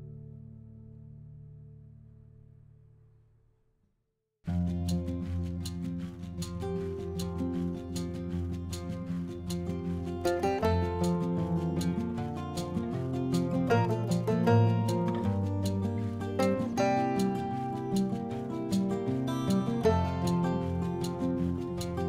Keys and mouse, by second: 0.4 click, 0.8 r, 2.3 click, 3.4 r, 4.3 click, 5.0 r, 5.2 z, 5.7 click, 6.2 g, 6.3 z, 6.9 click, 7.3 click, 8.6 g, 8.8 z, 9.5 click, 10.0 s, 11.7 click, 14.6 click, 14.6 r, 14.9 middle click, 16.2 click, 16.9 click, 17.4 click, 18.3 click, 19.3 a, 20.1 click, 20.7 r, 21.9 click.